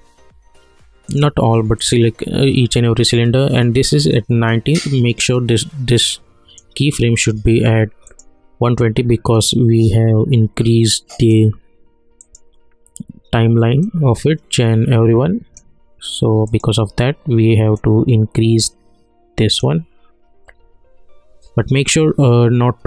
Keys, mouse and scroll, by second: 1.1-21.8 drag.